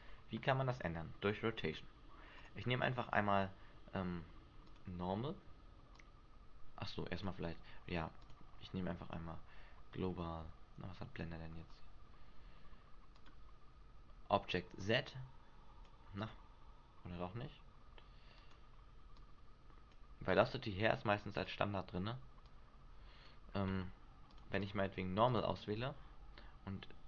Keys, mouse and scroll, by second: 2.4 click, 8.2 click, 14.8 click, 16.2 click, 19.1 click, 20.2 click, 22.4 click, 24.3 click.